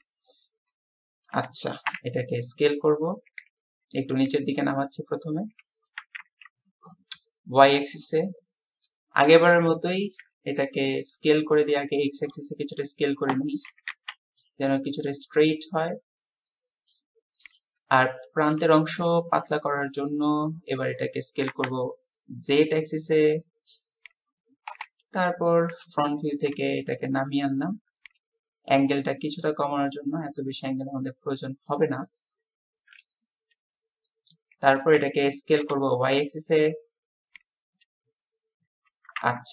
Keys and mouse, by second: 0.7-1.5 middle drag, 1.9 KP_1, 4.3-6.2 drag, 6.2 ctrl+z, 8.4-8.9 drag, 10.2 KP_7, 17.8 middle click, 18.8-20.2 shift+middle drag, 21.4 s, 24.1 s, 24.7 KP_3, 25.7 KP_1, 26.7 shift+middle click, 27.0 shift+click, 28.8-32.1 drag, 32.9 KP_7, 35.0 s.